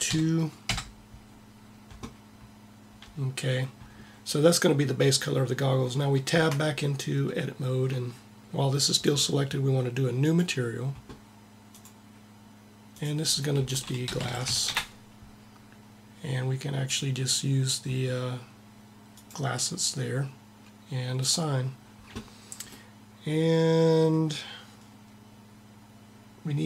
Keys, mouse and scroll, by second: 6.1 Tab, 9.9-11.5 drag, 14.2 s, 20.9-22.8 drag, 22.8-24.0 middle drag.